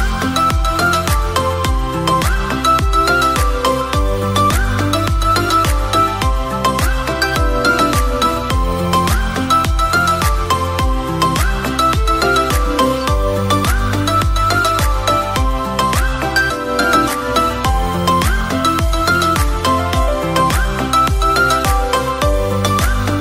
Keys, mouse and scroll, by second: 3.2-4.8 drag, 6.7 r, 8.0 y, 10.7 click, 11.1 s, 12.1 click, 12.7 KP_1, 14.1 g, 14.6 x, 16.8 click, 17.3 r, 18.1 y, 19.5 click, 20.6-22.1 drag.